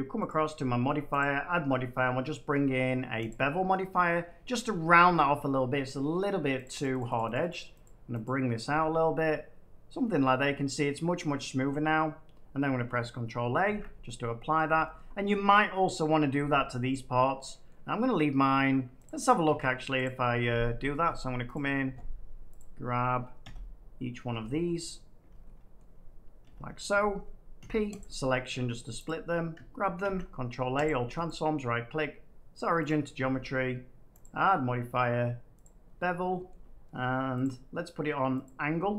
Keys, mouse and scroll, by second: 8.6 click, 9.8 middle click, 12.8 middle click, 13.6 ctrl+a, 14.6-15.8 middle drag, 17.6 middle click, 19.0 click, 19.4 Tab, 20.0 click, 20.8 click, 21.5 click, 22.5 click, 25.7 middle click, 26.4 i, 27.5 p, 27.9 click, 28.4 Tab, 29.0 click, 29.9 ctrl+a, 30.8 click, 31.2 right click, 32.8 click, 34.1 click, 35.5 click, 36.4 shift+middle click, 37.3 click, 38.4 click.